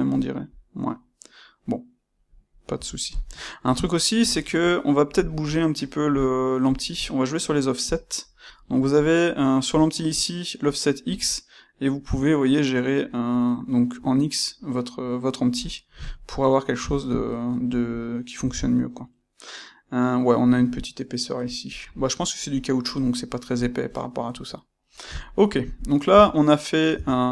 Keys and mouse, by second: 2.7 Tab, 2.7-6.0 middle drag, 6.0 click, 7.8 click, 11.2-16.0 shift+drag, 16.0-17.9 ctrl+middle drag, 21.8-25.7 middle drag, 25.7 click, 26.0 Tab.